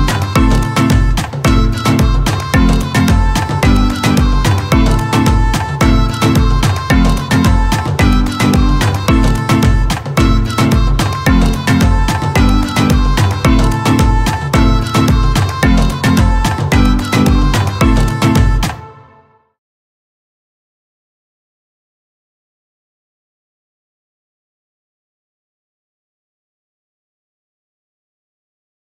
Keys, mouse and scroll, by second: 0.0-0.7 typing, 1.6 middle click, 3.2 drag, 16.7 scroll down 2, 17.1 scroll up 2, 18.6 drag, 19.1 drag, 19.6 drag, 20.1 drag, 21.6 scroll down 2, 21.8 space, 22.6 click, 23.1-27.1 typing, 25.1 Return.